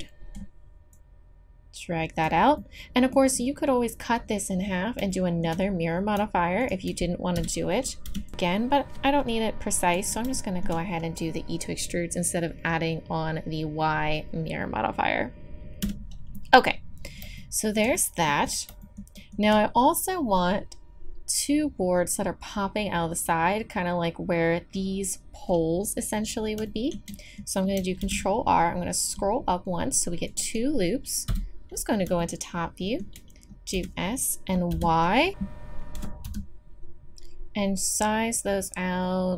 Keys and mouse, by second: 2.6 middle click, 3.3 middle click, 4.2-5.7 middle drag, 6.7 click, 7.3 KP_3, 8.0 e, 15.8 a, 18.9-21.9 drag, 21.9-26.6 middle drag, 26.6 click, 28.0 ctrl+r, 31.3 KP_7, 33.7 s, 35.9 s.